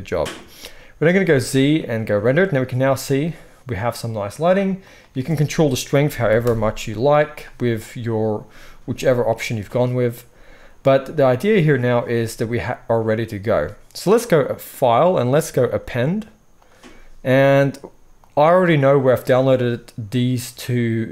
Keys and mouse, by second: 1.2 z, 15.0-15.7 middle drag, 15.7-21.1 drag.